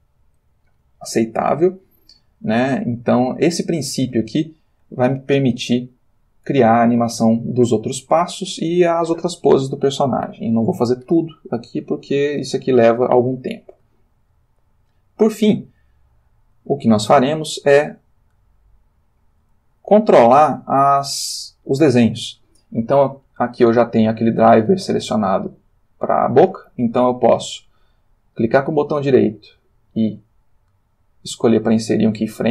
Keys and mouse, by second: 1.0-2.5 ctrl+middle drag, 2.7-4.0 shift+middle drag, 12.3 middle click, 14.3-16.9 shift+middle drag, 18.4 click, 28.4 right click.